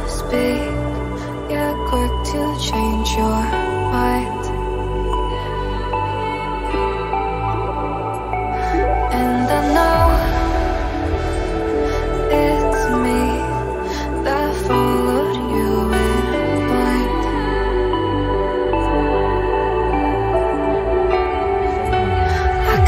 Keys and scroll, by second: 2.9 0, 10.1-11.0 typing, 15.9 ctrl+t.